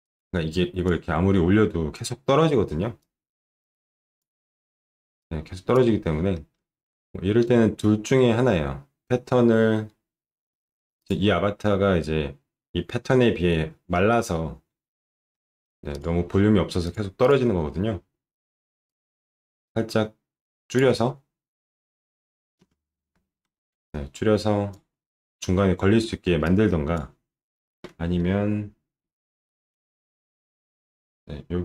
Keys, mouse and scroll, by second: 0.0 click, 2.3 alt+middle click, 3.0-4.1 drag, 5.2 click, 6.4 alt+middle click, 8.1 middle click, 11.0 click, 15.3 alt+middle click, 15.9 click, 16.8 click, 17.2 click, 18.8-20.7 drag, 22.6 space, 23.5 alt+middle click, 23.8 click, 26.4 click, 29.7 ctrl+shift+9.